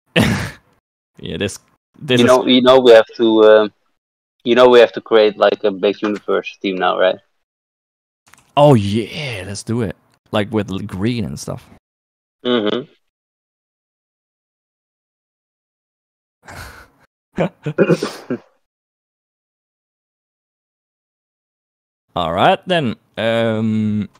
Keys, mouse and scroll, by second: 0.0 click, 8.8 ctrl+s, 23.2 right click.